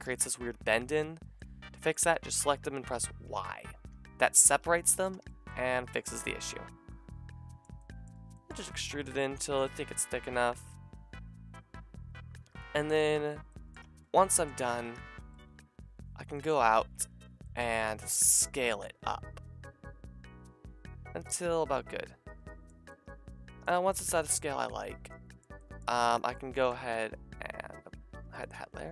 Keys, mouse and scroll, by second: 0.0-1.2 drag, 1.2 shift+middle click, 2.0-5.1 drag, 3.2 y, 3.9 g, 4.6 r, 5.1 Tab, 6.4-8.2 middle drag, 8.5-9.4 middle drag, 10.3-13.5 shift+middle drag, 13.5-13.8 drag, 13.8 Tab, 14.5 a, 14.7 a, 14.9 a, 15.2 Tab, 17.9 s, 21.3-23.8 shift+middle drag, 23.8 a, 26.1 click, 28.1 h, 28.4 click.